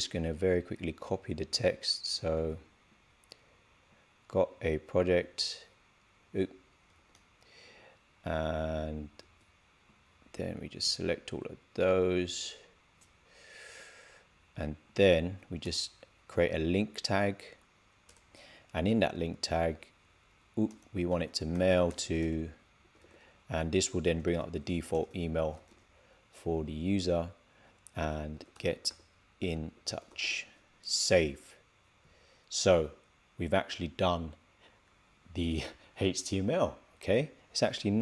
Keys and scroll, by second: 1.9 super+a, 2.3 super+c, 5.1 super+v, 6.8 shift+', 9.1 super+c, 12.1 super+v, 22.1 shift+i, 24.1 shift+2, 28.2 shift+g, 30.8 super+s.